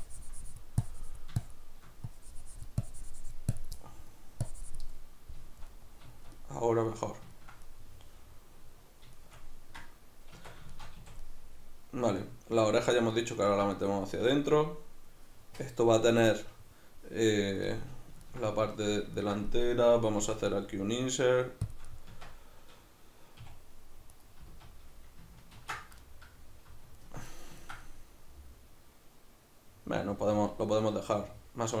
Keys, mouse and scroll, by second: 3.8 middle click, 4.4 click, 5.0-21.7 middle drag, 10.4 Tab, 11.0 a, 20.2 i, 21.7 shift+click, 21.9-24.1 middle drag, 22.1 Tab, 23.4 a, 24.1 right click, 24.5 z, 25.5 ctrl+2, 26.0-31.8 middle drag.